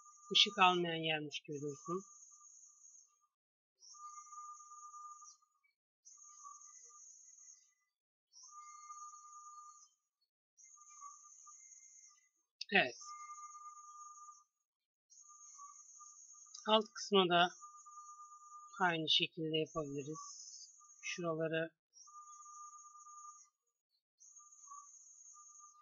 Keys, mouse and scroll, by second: 1.0 g, 2.0 a, 2.4 c, 10.0 g, 11.3 Tab, 15.5 KP_3, 15.9 KP_1, 18.4 Tab, 19.0 a, 19.3 c.